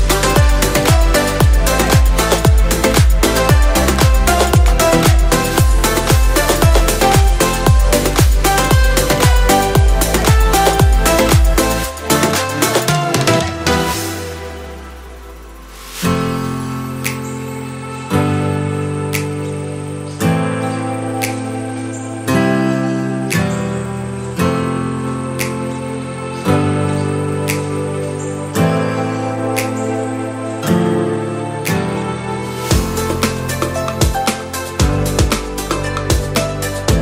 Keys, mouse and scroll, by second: 5.0 click, 5.8 Tab, 7.1-7.6 scroll up 2, 8.4-8.9 scroll up 1, 9.3 3, 9.8 click, 10.7-11.0 scroll down 1, 11.0-12.8 middle drag, 12.8 KP_7, 13.4 scroll up 1, 13.5 scroll down 1, 13.8 scroll up 1, 14.3 scroll up 1, 14.7 shift+middle click, 15.9 e, 17.3 click, 18.4 r, 19.9 click, 20.7 g, 25.5 click, 29.9 click, 30.5 r, 32.3 click, 32.6 g, 34.7 click, 35.6 r.